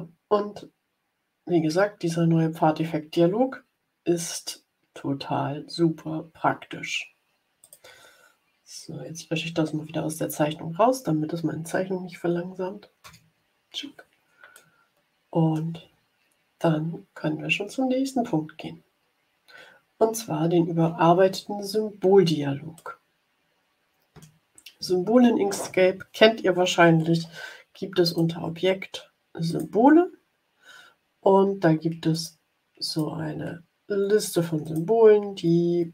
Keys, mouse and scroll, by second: 3.6 scroll up 2, 4.9 scroll up 2, 7.5 click, 13.1 Delete, 14.4-15.7 middle drag, 18.3-18.8 ctrl+scroll up 3, 19.6 ctrl+scroll up 1, 22.7-24.3 middle drag, 28.0 click, 29.4 click, 30.9-31.5 scroll up 2, 32.0 click, 32.8 click, 34.5 click.